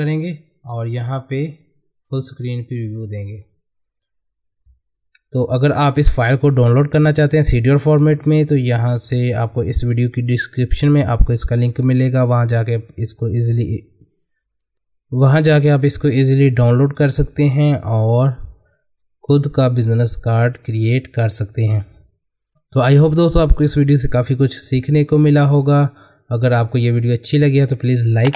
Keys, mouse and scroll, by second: 2.0 click.